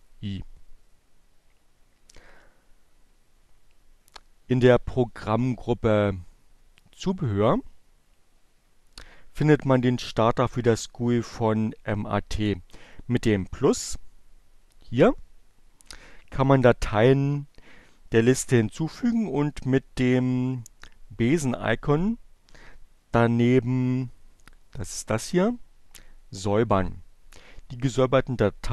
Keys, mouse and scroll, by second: 5.4-7.1 drag.